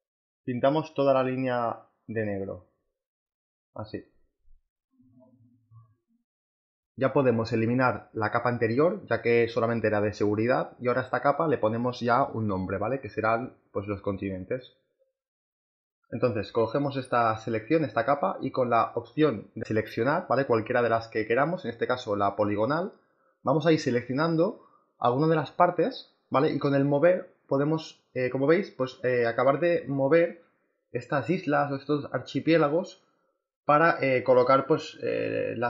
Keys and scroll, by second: 9.2 Delete, 9.8 space, 12.6-13.8 typing, 34.1 ctrl+t.